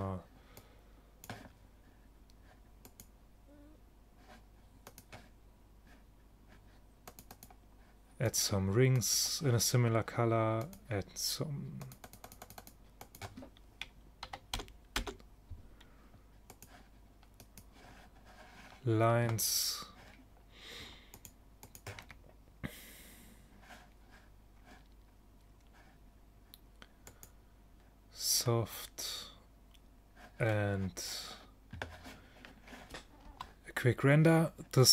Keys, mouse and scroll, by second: 2.9-4.7 drag, 4.8 middle click, 6.8 middle click, 10.2 middle click, 14.8 middle click, 16.6-18.4 drag, 21.2-23.4 drag, 27.2-28.9 drag, 30.9-32.4 middle drag.